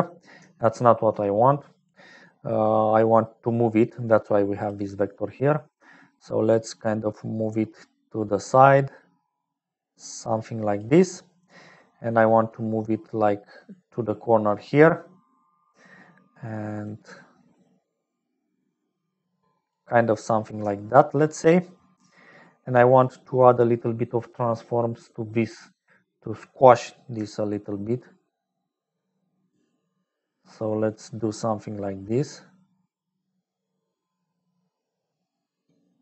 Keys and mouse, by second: 0.0-36.0 typing, 2.4 click, 4.0 click, 6.8-10.9 shift+drag, 12.2-14.2 shift+drag, 16.8-19.8 shift+drag, 20.6 shift+click, 21.3 click, 22.9 click, 27.4-29.4 right drag, 30.6-36.0 shift+right drag.